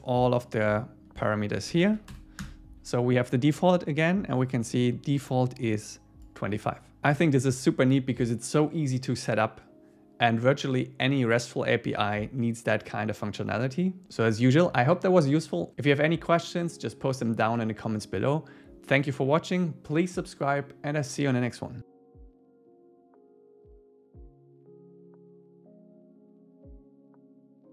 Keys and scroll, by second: 1.3 Left, 1.9 shift+super+Right, 2.5 Return.